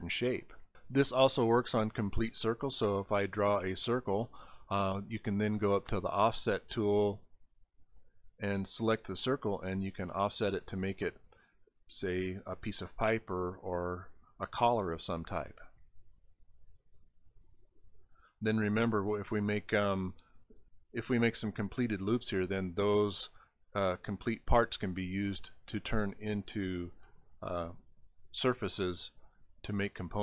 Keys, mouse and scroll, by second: 2.9 click, 3.7 click, 5.8 click, 8.7 click, 11.9 click, 11.9 right click, 18.0 click, 19.8 click, 20.5 click, 25.7 click, 29.6 ctrl+z.